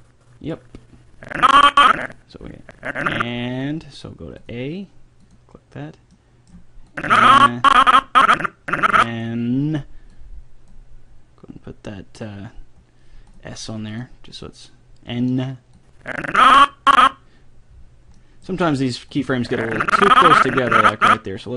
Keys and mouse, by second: 1.6-3.6 middle drag, 4.4-8.7 drag, 6.1 middle click, 6.1 right click, 10.1-15.6 drag, 15.8-17.6 drag, 17.7-19.6 middle drag, 19.2-20.9 drag.